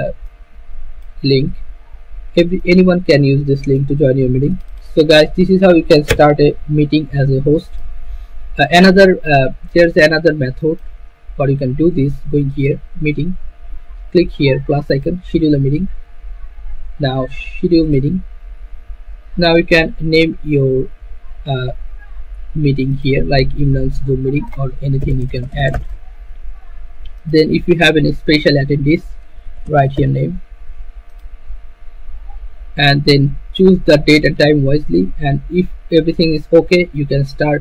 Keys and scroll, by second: 6.2 BackSpace, 24.8-27.4 typing, 29.4-30.8 typing.